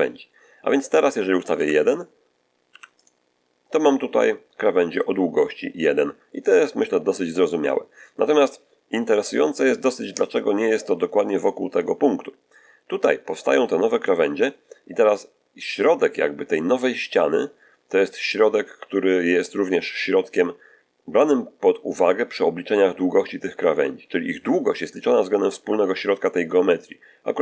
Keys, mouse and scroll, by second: 1.3 click, 1.4 1, 2.5 1, 2.9 click.